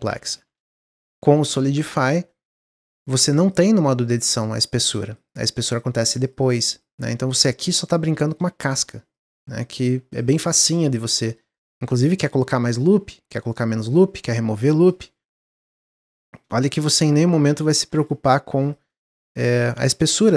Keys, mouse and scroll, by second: 0.0 ctrl+z, 0.2 ctrl+z, 0.4 ctrl+z, 0.5 ctrl+z, 0.7 ctrl+z, 1.1 ctrl+z, 1.4 ctrl+z, 1.9 Tab, 2.2-3.4 middle drag, 3.4 click, 4.0 click, 4.4 click, 4.7 click, 5.0 click, 5.2 click, 5.4 click, 5.6 click, 5.8 click, 6.0 click, 6.2 click, 6.4 click, 6.7 click, 7.0 middle click, 7.4 Tab, 7.7 click, 8.2 click, 8.7 g, 9.5 click, 9.7 g, 10.5 click, 10.9 g, 11.5 middle click, 11.9 ctrl+r, 13.1 ctrl+r, 14.8 alt+click, 15.5 x, 16.4 ctrl+z, 17.3 x, 17.9 click, 19.6 x.